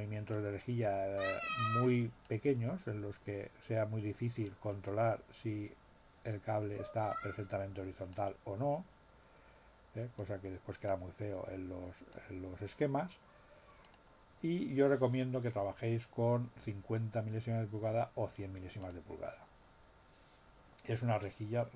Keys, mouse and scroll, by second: 0.3-2.0 drag, 2.2-7.3 drag, 8.1-10.4 drag, 10.8-12.3 drag, 13.8 click, 18.8 click.